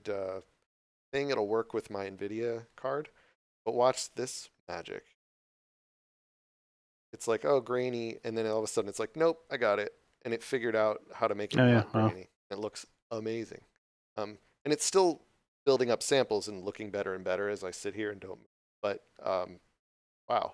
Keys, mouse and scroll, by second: 5.8 click.